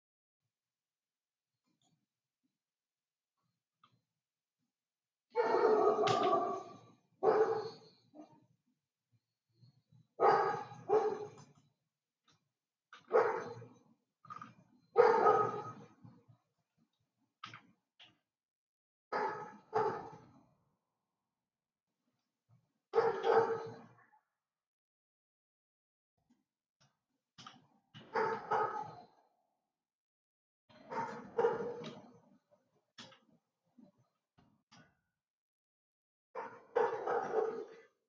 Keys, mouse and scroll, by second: 6.7 s, 13.5 g, 18.1 g, 23.3 g, 27.8 g, 33.5 s.